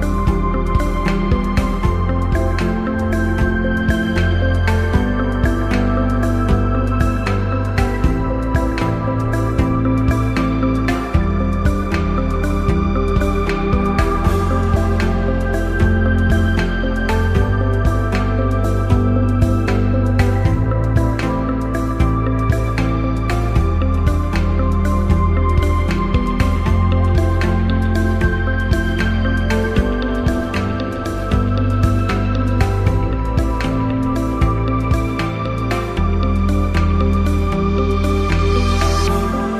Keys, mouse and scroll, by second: 0.6 click, 2.0 click, 3.8 click, 5.8 click, 7.4 click, 9.0 click, 9.7 click, 10.7 click, 12.4 click, 14.3 ctrl+=, 17.6 click, 18.3 ctrl+-, 22.9 click, 25.9 click, 27.7 click, 28.0 shift+click, 39.0 shift+click.